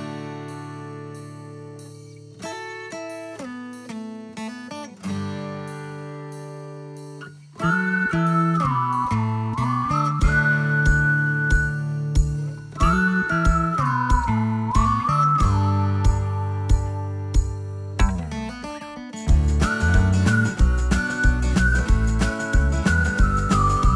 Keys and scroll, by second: 15.0-16.0 typing, 21.5-22.3 typing, 23.5-23.9 typing.